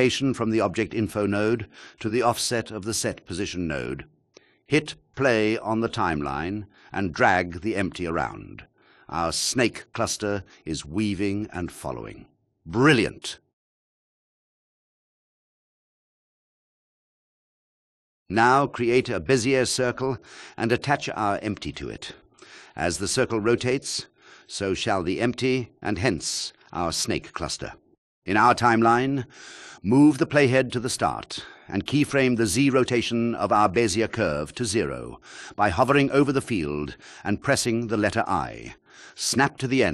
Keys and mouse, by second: 3.0 click, 5.7 g, 7.8 g, 11.7 g, 19.1 drag, 22.7 shift+a, 30.2 click, 32.5 i, 33.9 click, 35.2-38.3 drag.